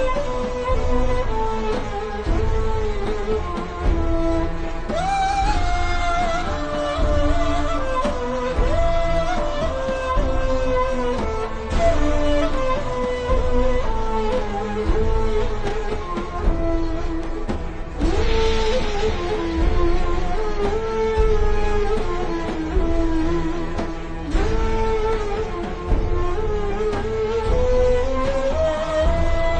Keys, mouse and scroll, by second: 1.6 z, 2.5 click, 3.1 v, 10.5 v, 10.7 click, 11.1 alt+shift+scroll down 1, 12.0 alt+shift+scroll up 1, 13.0 alt+scroll up 1, 13.3 click, 14.9 alt+shift+scroll up 1, 15.0 a, 15.1 click, 16.6 click, 17.0-17.5 alt+shift+scroll down 2, 17.5 click, 19.9-21.2 alt+shift+scroll down 2, 23.2 click, 25.0 click, 25.6 a, 25.9 click, 29.0 v, 29.1 click.